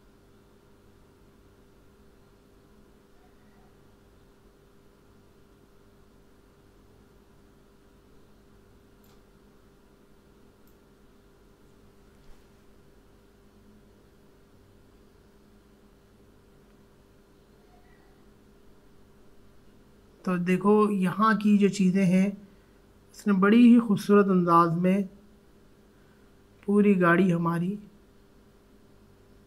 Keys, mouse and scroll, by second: 9.4 alt+scroll down 1, 10.6-20.7 drag.